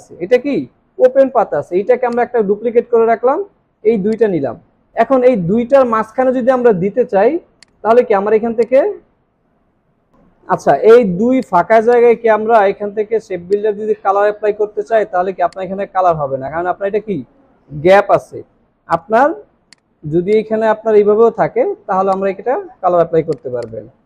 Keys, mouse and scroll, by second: 2.1 alt+click, 11.8 double click, 23.6 double click.